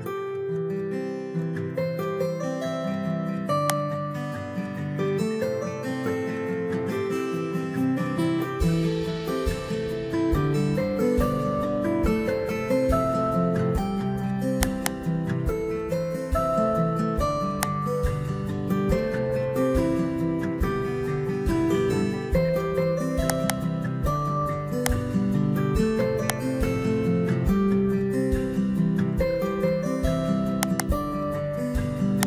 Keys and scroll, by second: 5.8 ctrl+v, 21.7 ctrl+x, 25.7 Return, 27.3 ctrl+v.